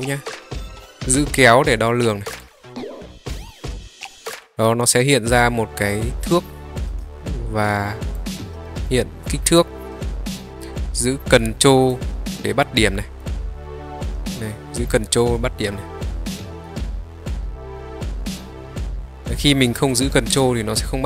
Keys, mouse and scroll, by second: 2.5-4.0 drag, 8.3 click, 10.1-11.9 drag, 13.3-21.0 drag.